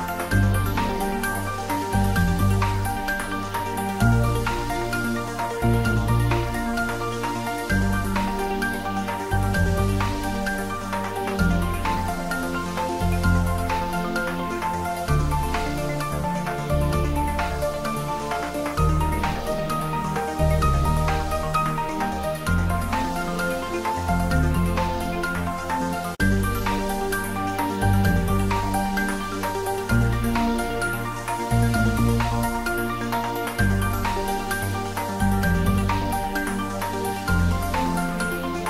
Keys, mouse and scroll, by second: 0.1 5, 0.8 Return, 1.1 space, 2.7 click, 4.3 space, 4.7 click, 5.0 scroll down 1, 5.2 middle click, 6.0 click, 6.2 space, 7.8 click, 8.3 space, 9.3 click, 11.2 click, 11.6 scroll down 1, 12.2 Tab, 12.4-13.0 scroll up 1, 13.0 click, 14.1-14.6 scroll down 1, 14.6 Tab, 15.9-16.2 scroll down 1, 16.4 click, 17.7 scroll down 1, 19.3 click, 19.4 scroll down 1, 19.9 click, 20.5 3, 20.7 Return, 20.9-21.2 scroll down 1, 21.4 scroll down 1, 23.0 click, 24.4-24.8 scroll down 1, 24.8 click, 25.0-25.4 scroll down 1, 26.2-26.9 scroll down 1, 27.6 click, 28.6 space, 30.0-32.2 middle drag, 32.2 right click, 32.6 click, 33.0-34.3 middle drag, 34.3 ctrl+3, 34.6-36.4 middle drag, 36.4 click.